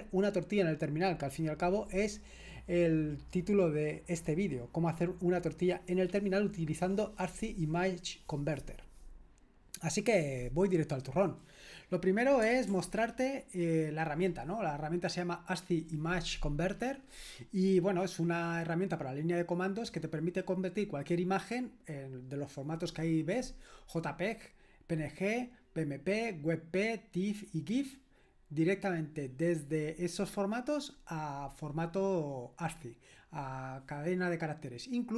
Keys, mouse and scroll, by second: 12.7 super+l.